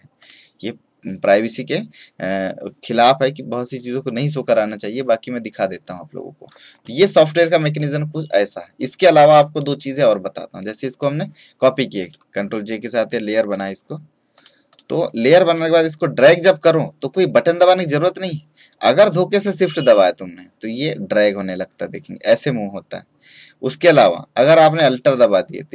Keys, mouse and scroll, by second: 7.7-11.8 drag, 11.9 right click, 13.4-25.5 drag.